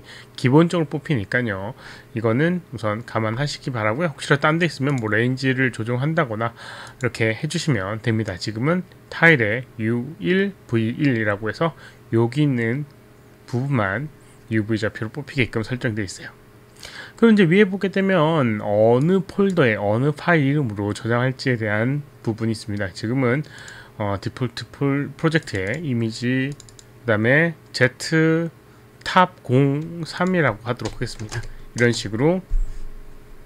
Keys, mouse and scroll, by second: 5.5 click, 7.0 click, 19.1 click, 24.2 click, 25.5 click, 25.7 click, 26.8 click, 30.5 click, 31.5 3, 31.5 BackSpace, 32.2 Return, 32.5 Return.